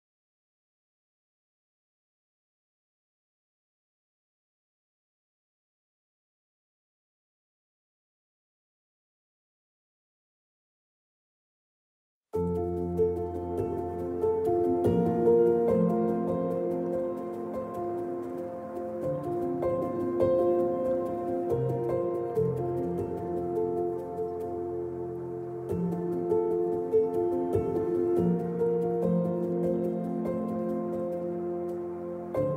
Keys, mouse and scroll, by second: 0.0 scroll up 2, 0.2 scroll down 2, 0.4-1.5 shift+middle drag, 0.6 scroll up 2, 1.5-2.9 right drag, 2.9-5.3 drag, 5.3 ctrl+right click, 5.8-9.9 middle drag, 9.9 click, 10.0 KP_0, 10.1 scroll up 1, 10.2-13.6 shift+middle drag, 10.7-11.3 scroll up 3, 10.9 KP_0, 12.1 scroll down 1, 15.6-17.9 drag, 16.5 ctrl+z, 17.6 z, 18.1 click, 18.3 middle drag, 18.5-20.2 drag, 20.2 middle click, 20.3 click, 21.3-21.6 drag, 21.6 middle click, 21.8-22.6 drag, 22.6 middle drag, 22.7-23.1 drag, 23.1 middle click, 23.2 click, 24.1 middle click, 24.5 click, 25.1 middle click, 25.2 click, 25.3 middle click, 25.4 click, 25.7 middle click, 25.8 click, 26.1-28.3 middle drag, 27.6 KP_0, 28.7-29.9 drag, 28.9 [, 29.9-32.5 middle drag, 30.3 KP_0, 30.4-32.5 scroll up 2.